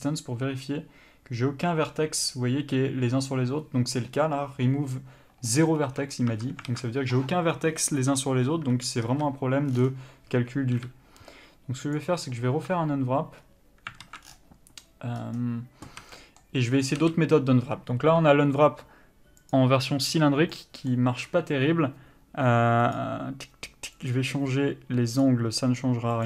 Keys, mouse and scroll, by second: 5.7 middle click, 6.1 Tab, 6.9 alt+a, 9.2 a, 12.2 u, 14.2 alt+a, 16.2 a, 16.4 middle click, 19.7 u, 24.3 click.